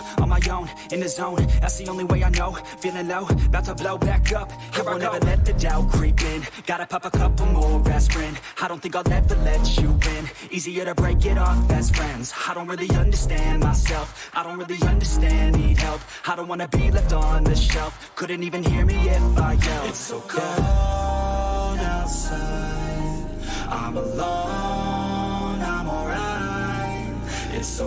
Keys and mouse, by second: 3.4-12.7 drag, 15.2 click, 21.3 click, 24.2 ctrl+c, 26.2 click.